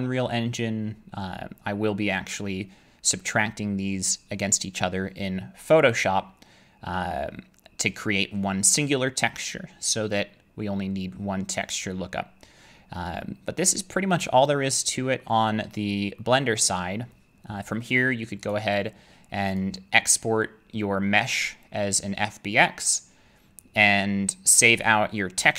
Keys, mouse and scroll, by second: 15.2 middle click, 16.6 middle click, 18.5 right click, 19.6 click.